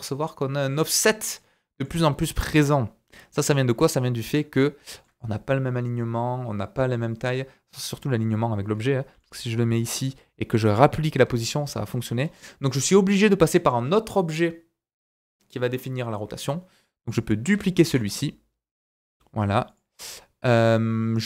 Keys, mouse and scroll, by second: 2.2-3.0 scroll up 1, 3.0-3.4 scroll down 3, 3.5 shift+middle click, 4.5 scroll up 2, 4.9 shift+middle click, 9.1 g, 12.2-13.0 scroll up 1, 13.0-16.0 scroll down 1, 17.1 click, 17.8 shift+d.